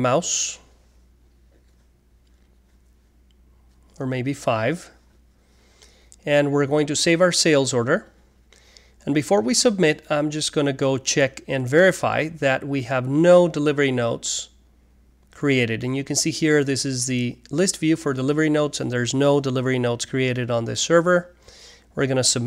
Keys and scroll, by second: 3.0 typing, 4.5-5.2 typing.